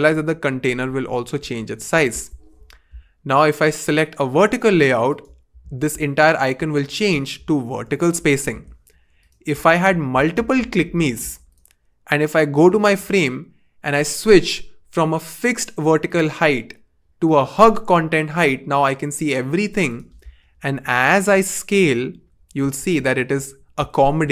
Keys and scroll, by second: 0.1 shift+Down, 0.3 shift+Down, 0.5 shift+Down, 9.5 super+d, 9.9 super+d, 10.1 super+d, 20.8 shift+Up, 21.0 shift+Up, 21.2 shift+Up, 22.6 shift+Down, 22.8 shift+Down, 23.0 shift+Down.